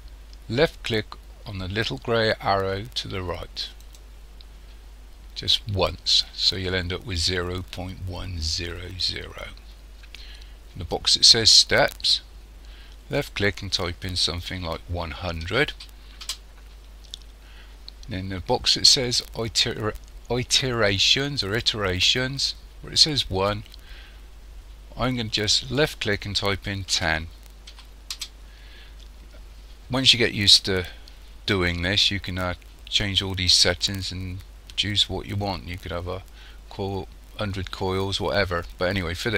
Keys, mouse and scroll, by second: 3.8 click, 13.1 click, 15.7 0, 25.8 click.